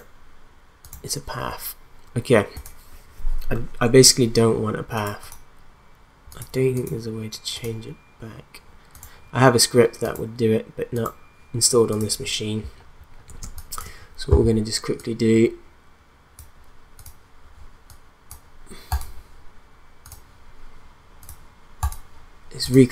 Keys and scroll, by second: 13.4 space.